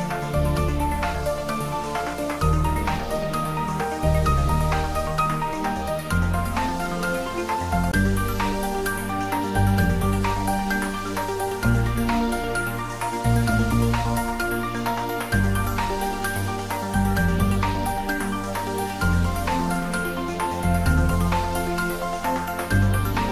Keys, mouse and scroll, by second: 2.2 click, 16.9 click, 20.7 click, 22.2-23.3 scroll down 1.